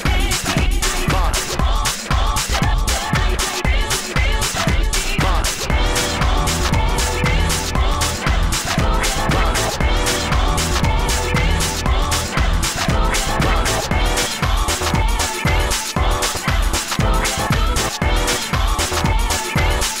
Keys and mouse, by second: 1.2-3.6 typing, 5.6 s, 5.7 f, 13.5-16.3 drag.